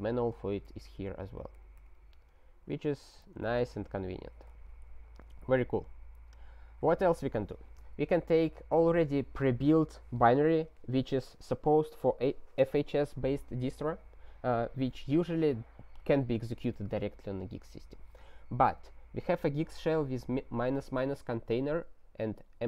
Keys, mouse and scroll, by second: 1.8 q, 2.7 ctrl+a, 2.9 ctrl+k, 3.2 ctrl+d, 4.4 alt+w, 5.9-11.0 scroll down 19, 12.8-21.2 scroll.